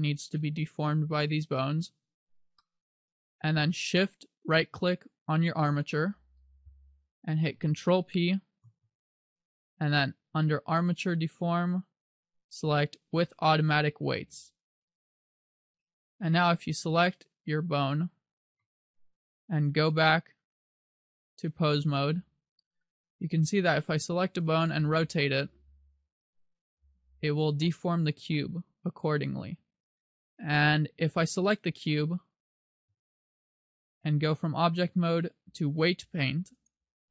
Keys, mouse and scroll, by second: 2.1 g, 2.5 right click, 2.7 middle click, 5.8 shift+right click, 8.8 ctrl+p, 16.6 right click, 17.1 right click, 18.7 KP_7, 20.9 click, 24.1 right click, 24.7 r, 31.3 right click, 32.3 right click, 34.2 click.